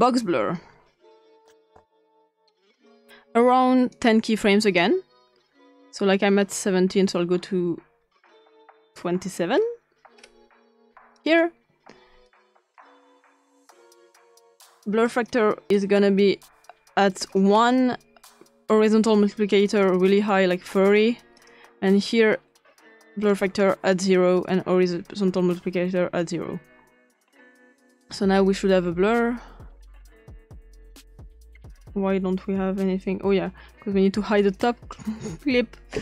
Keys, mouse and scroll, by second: 1.4 click, 1.7 typing, 2.2 click, 2.5 click, 4.0 click, 4.8-9.2 drag, 9.5 scroll down 1, 10.2 scroll up 2, 11.2 click, 12.2 click, 12.9 click, 13.6 click, 14.7-15.3 drag, 17.5-19.0 scroll up 2, 20.1 click, 21.3 click, 23.3-23.6 drag, 27.8-31.1 drag, 34.4 click.